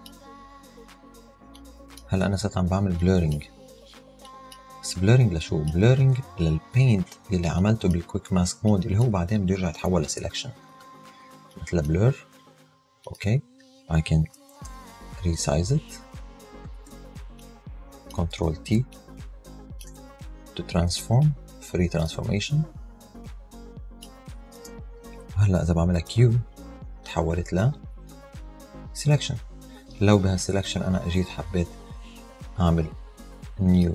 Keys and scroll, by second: 14.6 super+t, 24.6 Return, 26.1 q.